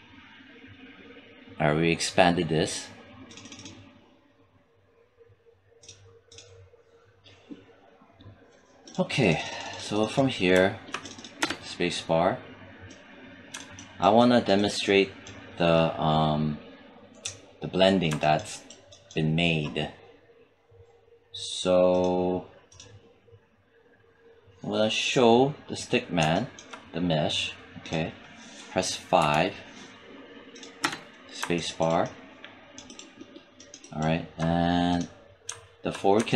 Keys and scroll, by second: 11.2 space, 29.0 5, 30.7 space.